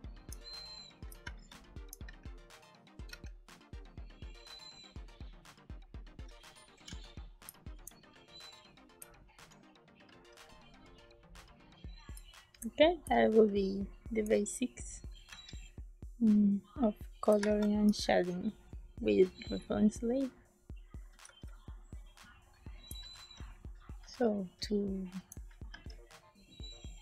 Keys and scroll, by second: 1.0 space, 1.9 b, 3.0 e, 6.2-8.9 typing, 13.0 space, 15.2 e, 17.2 space, 21.2 z, 22.8 space, 23.9 ctrl+space, 25.6 ctrl+s.